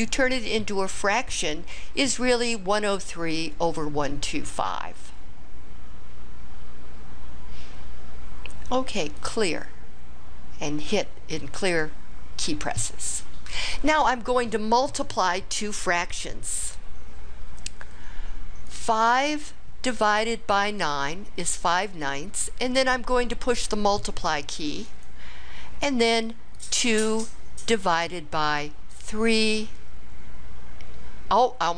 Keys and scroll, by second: 18.7 5, 20.8 9, 24.9 *, 26.6 2, 29.1 3.